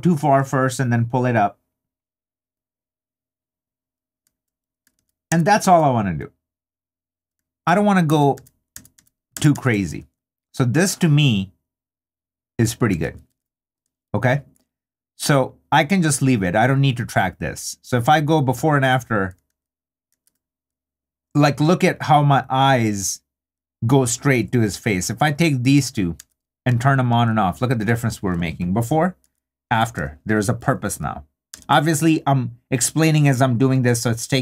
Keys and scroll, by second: 5.0 super+d, 8.1 super+d, 13.0 super+d, 19.5 super+d, 26.2 super+d, 29.2 super+d, 30.9 super+d.